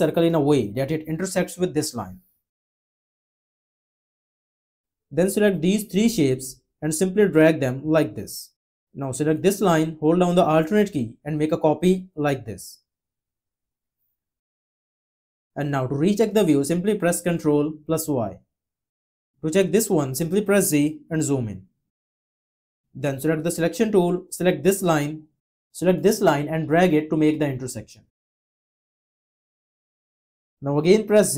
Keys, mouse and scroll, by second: 10.3 alt+click, 18.0 ctrl+y, 20.6 z.